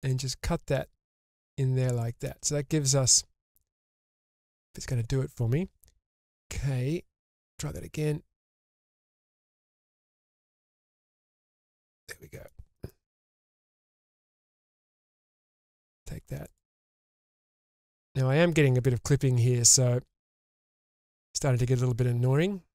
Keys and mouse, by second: 4.0-4.6 middle drag, 11.0 click, 11.8 middle click, 13.4 1, 14.3-15.6 drag, 15.6 2, 15.8 click, 16.5 shift+click, 18.0 ctrl+x.